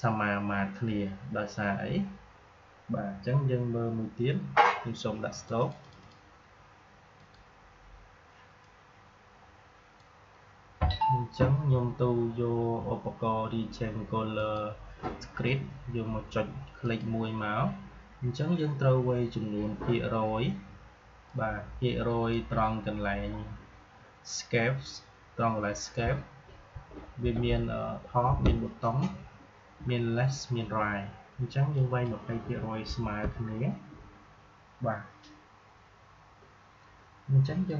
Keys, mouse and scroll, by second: 5.3-12.4 drag, 14.3 click, 16.7 click, 21.2-31.7 drag, 37.6 click.